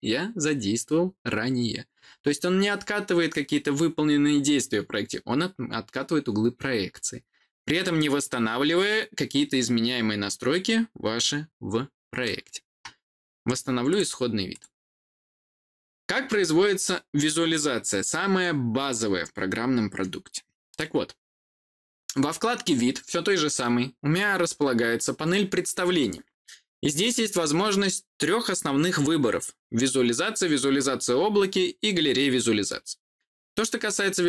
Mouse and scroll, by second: 13.8 click, 14.4 click.